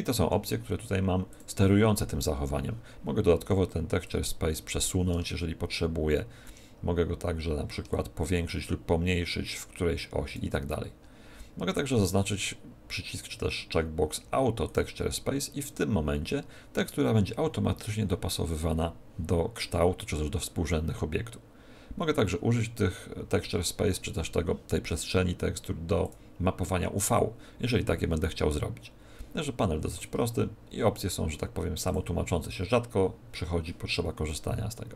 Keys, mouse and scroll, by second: 1.3 click, 4.0 click, 7.9 shift+click, 14.6 click, 26.0 click, 29.9 click, 31.8 click.